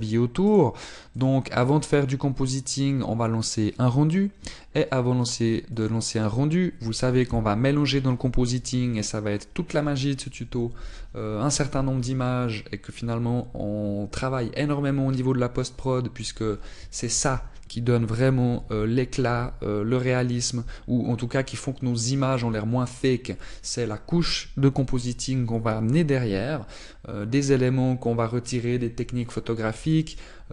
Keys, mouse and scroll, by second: 1.6 click.